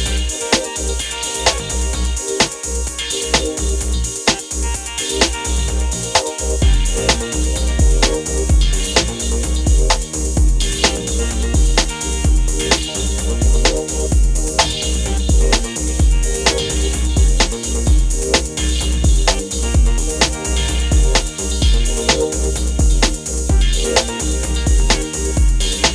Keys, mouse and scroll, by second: 1.2-1.6 alt+scroll up 1, 3.0 click, 5.7-6.2 shift+drag, 10.0 shift+click, 10.6-11.7 alt+scroll up 2, 11.9-12.9 shift+drag, 13.1-13.7 alt+scroll down 1, 14.2 click, 15.8-17.3 alt+shift+drag, 17.2-18.2 drag, 18.4-20.4 drag, 21.1-21.8 scroll up 1, 22.0-22.7 drag, 23.7-24.0 alt+scroll up 1, 24.1 space, 24.2-24.7 click, 24.5 space, 25.0 click.